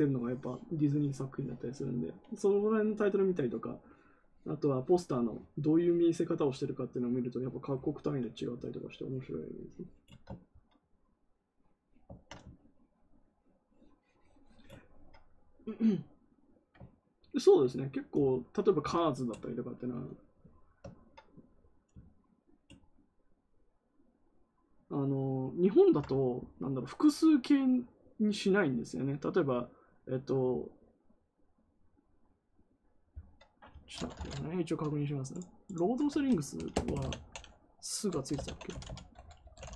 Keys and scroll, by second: 36.7-39.7 typing.